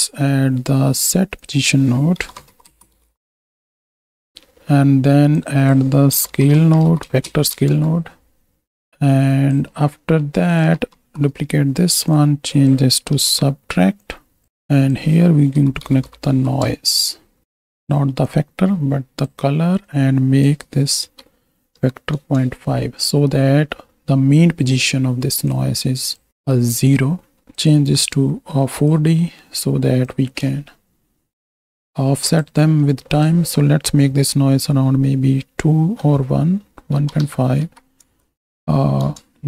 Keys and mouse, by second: 0.2 shift+a, 4.0 middle click, 5.4-7.8 drag, 8.8 click, 9.6-10.2 middle drag, 10.5 click, 11.0 shift+d, 12.0 click, 12.5 click, 13.9 click, 14.7-17.4 drag, 18.3-19.3 drag, 19.8-22.2 drag, 25.5 click, 26.6 right click, 27.3 middle click, 27.5-28.9 drag, 29.2 middle click, 30.0-32.4 drag, 33.2-39.0 drag.